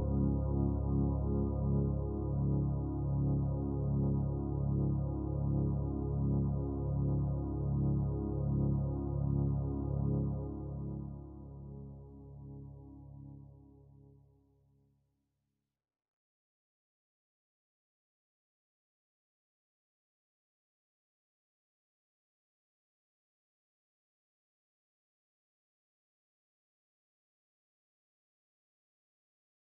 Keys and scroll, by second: 17.7 ctrl+z, 18.7 ctrl+alt+z.